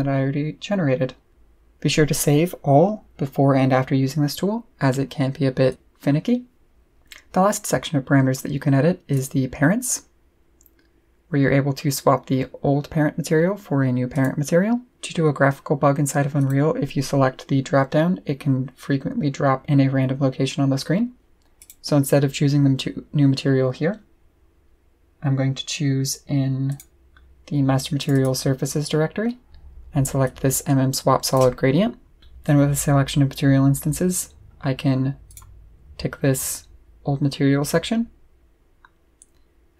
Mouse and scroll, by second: 5.7 click, 9.1 click, 14.1 click, 16.4 click, 21.6 click, 24.7 scroll up 2, 25.1 middle click, 25.7 middle click, 26.7 click, 28.0 click, 29.1-29.7 scroll down 2, 30.2-31.3 drag, 35.3 click.